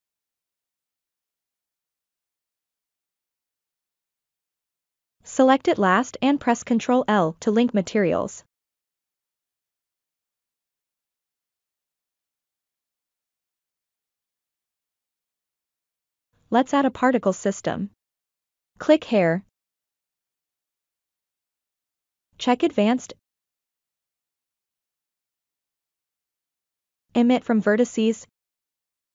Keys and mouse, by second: 0.4-1.6 middle drag, 2.2-3.2 middle drag, 6.2 ctrl+l, 10.1 click, 10.9 click, 12.0-12.4 shift+middle drag, 12.7-14.7 middle drag, 16.1 click, 18.6 click, 22.6 click, 23.6 click, 24.8 click, 26.1 click, 27.4-28.2 drag.